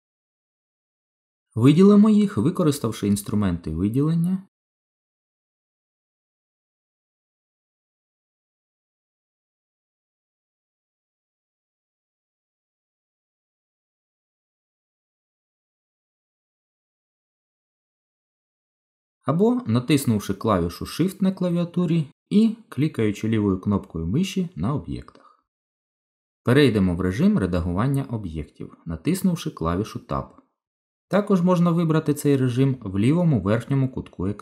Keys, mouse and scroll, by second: 3.4 click, 6.1 click, 10.1 click, 15.8 click, 19.1 click, 20.3 click, 21.7 shift+click, 22.9 shift+click, 30.1 Tab, 31.8 Tab.